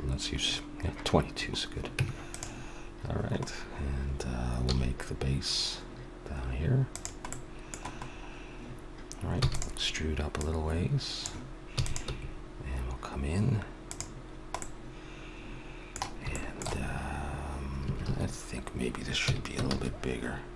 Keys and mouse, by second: 1.9 Tab, 4.6 s, 9.4 e, 10.4-12.2 drag, 11.7 e, 12.1 s, 14.2-15.2 middle drag, 17.8 a, 18.0 middle click, 18.1 a, 19.2 s.